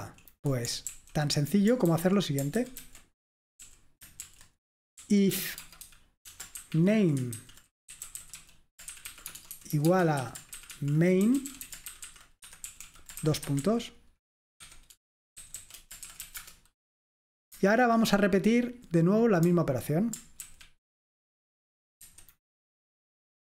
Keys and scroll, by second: 0.0 Right, 0.9 super+l, 1.9 super+h, 2.6 ctrl+w, 2.9 ctrl+w, 3.6-16.8 typing, 18.6-19.3 typing, 20.5 ctrl+w, 20.6 ctrl+w, 22.1 F5.